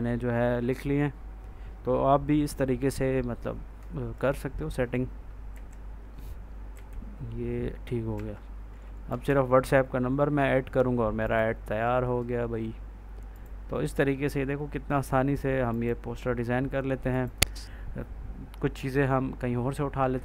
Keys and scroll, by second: 5.4 Right, 6.6 Down, 8.0 F4, 9.1 ctrl+s.